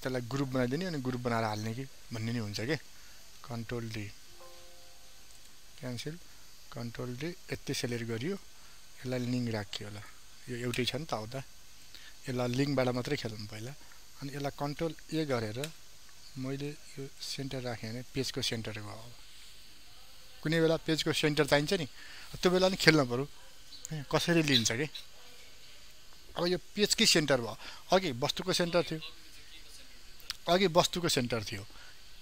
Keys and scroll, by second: 1.3 ctrl+alt+z, 3.5 ctrl+s, 3.9 ctrl+d, 8.2 ctrl+d, 15.0 ctrl+a.